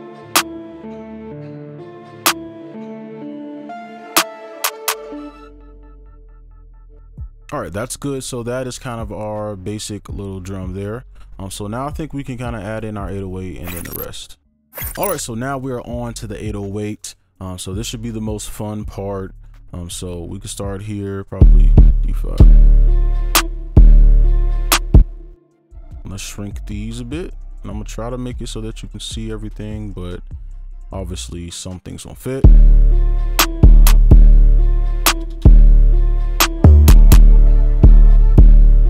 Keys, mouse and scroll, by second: 0.2-2.5 alt+scroll down 1, 5.3 space, 5.9 double click, 7.0 right click, 8.2 double click, 21.8 double click, 23.4 space, 23.7 space, 24.7 space, 25.6 ctrl+a, 26.9 right click, 29.1-29.7 scroll up 1, 29.7 right click, 31.8 double click, 32.4 space, 33.9 space, 34.1 space, 35.0 ctrl+click, 35.2 space, 35.3 ctrl+Up, 35.8 right click, 38.1 space, 38.3 space.